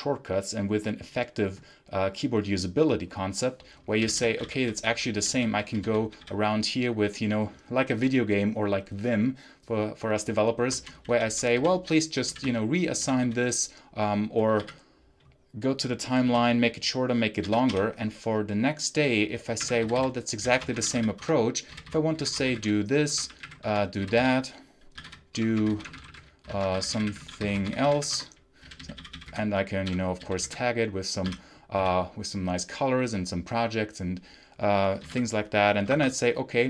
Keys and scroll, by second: 3.9-6.2 typing, 10.7 ctrl+j, 11.0 ctrl+k, 11.4 ctrl+j, 11.6 ctrl+k, 12.1 ctrl+j, 12.6-14.5 typing, 16.1 shift+g, 17.3 q, 17.6 l, 19.2-31.6 typing, 34.6-35.5 typing, 35.8 Escape.